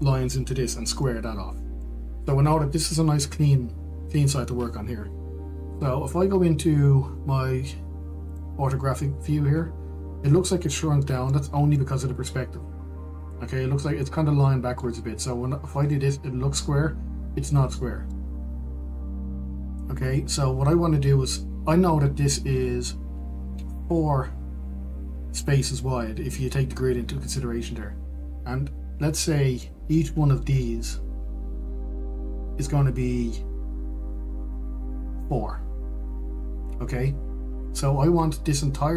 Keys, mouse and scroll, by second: 9.7 click, 12.6-17.2 shift+middle drag, 17.2 click, 19.0-38.9 shift+middle drag.